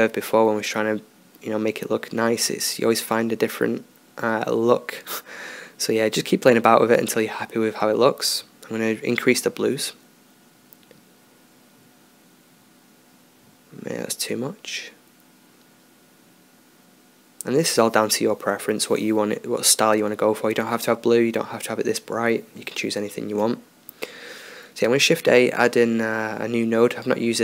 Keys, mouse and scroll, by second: 18.0 middle drag, 18.1 click, 19.0-21.3 drag, 21.3 shift+a.